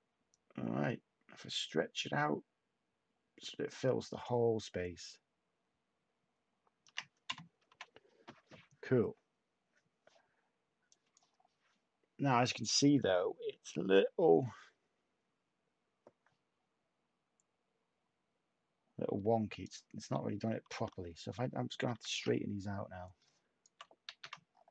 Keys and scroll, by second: 7.6 /, 20.7 u, 21.9 h, 24.0 ctrl+z.